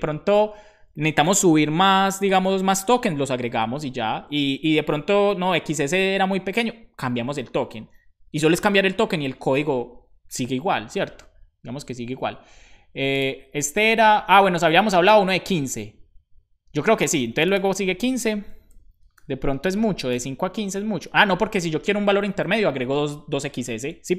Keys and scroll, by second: 19.1 5.